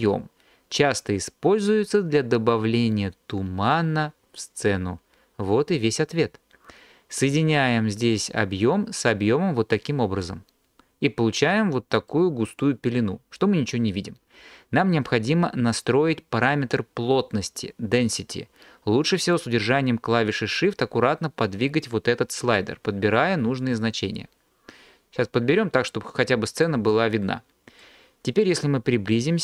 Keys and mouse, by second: 8.1 drag, 19.4-26.7 drag.